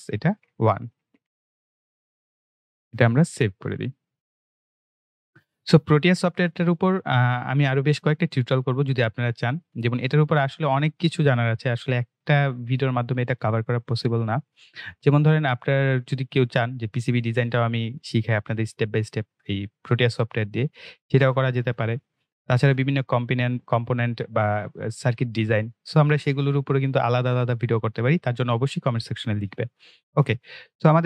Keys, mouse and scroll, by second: 0.0-1.6 typing, 4.0 click.